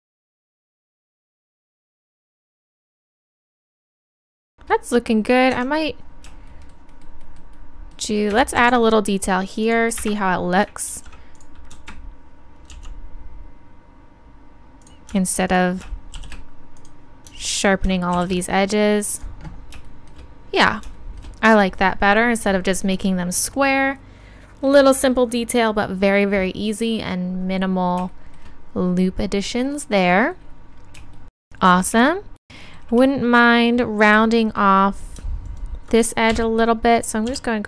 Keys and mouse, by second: 0.0-1.7 typing, 0.7 click, 1.0 click, 2.1 click, 3.1 click, 3.3 shift+e, 3.8 shift+e, 4.2 Tab, 5.6 Tab, 8.6 ctrl+r, 12.7 s, 14.9-16.2 drag, 15.7 right click, 16.2 shift+e, 27.5-30.3 middle drag, 35.5 click, 36.3 KP_3, 37.3 g.